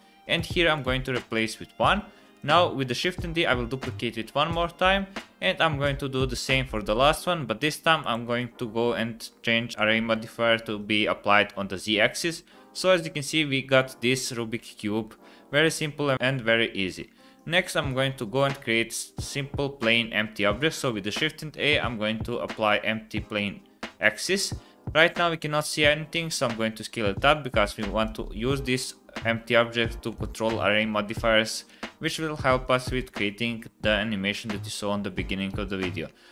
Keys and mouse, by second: 0.9 click, 2.4 click, 3.0 shift+d, 7.7 click, 9.7 click, 12.9-13.9 middle drag, 14.7-15.1 middle drag, 17.1-17.6 middle drag, 18.2-18.6 middle drag, 19.3 shift+a, 26.3 s, 32.9 click.